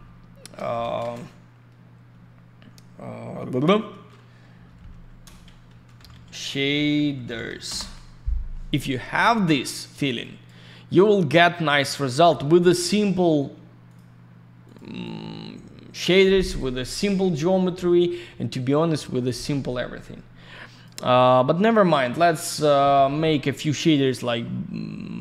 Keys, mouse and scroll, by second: 0.7 b, 0.7 BackSpace, 5.2 BackSpace, 5.7 shift+s, 7.1 typing, 7.7 Return, 9.4 click, 10.2 click, 11.1 click, 12.7 middle click, 12.9 middle click, 13.9 click, 13.9 click, 14.6 click, 14.7 click, 15.0 click, 16.4 click, 16.5 click, 16.8 F4, 17.0 click, 17.1 click, 17.6 F3, 18.2 F4, 19.2 click, 21.8 click, 21.9 click.